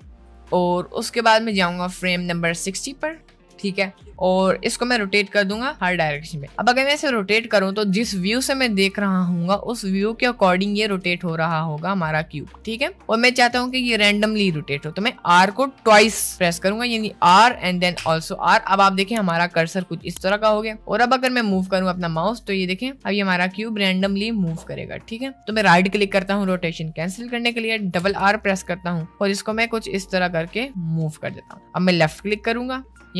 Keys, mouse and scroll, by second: 1.5-3.3 drag, 7.0 r, 10.2 middle click, 11.0 r, 13.0-13.6 middle drag, 14.0 r, 17.3 r, 28.0 r.